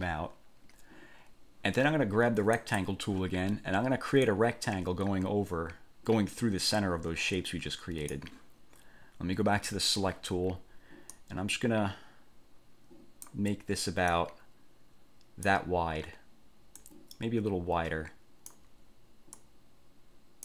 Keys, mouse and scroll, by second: 2.8 click, 4.4-8.5 drag, 9.8 click, 11.3-13.6 drag, 14.2-15.8 drag, 17.0 click, 19.5-20.4 drag.